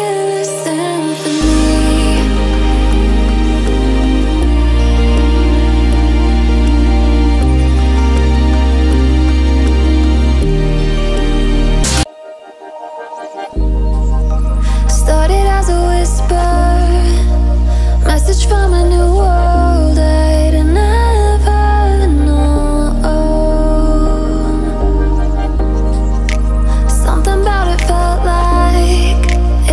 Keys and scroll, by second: 2.1 ctrl+t.